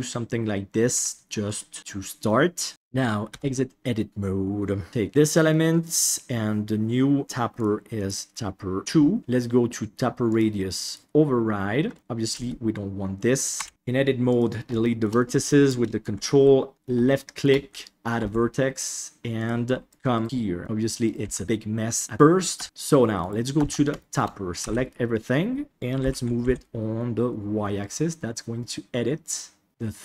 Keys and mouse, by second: 0.9 g, 1.8 Tab, 2.2-2.7 middle drag, 5.5-6.0 middle drag, 7.5 click, 7.9 click, 10.3 click, 11.9 middle click, 12.3 Tab, 13.5 a, 13.7 Delete, 14.8 shift+middle click, 15.1 middle click, 17.0 shift+middle click, 18.2 e, 19.9 right click, 19.9 g, 20.1 right click, 20.2 g, 21.2 g, 22.6 Tab, 23.2 right click, 23.9 shift+middle click, 24.6 a, 26.0 g, 29.7-30.0 drag.